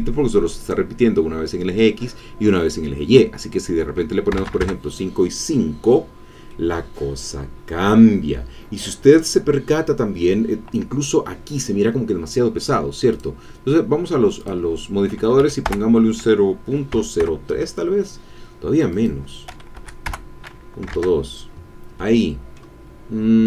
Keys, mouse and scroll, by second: 0.6 click, 4.3 KP_5, 4.4 Tab, 4.5 KP_5, 4.5 KP_Enter, 6.5 click, 6.7-8.7 middle drag, 13.1 click, 14.4 click, 15.4 Right, 15.7 BackSpace, 16.9 KP_3, 17.3 KP_Enter, 18.9 click, 19.7 Right, 20.1 BackSpace, 20.9 KP_Enter, 21.9 middle click.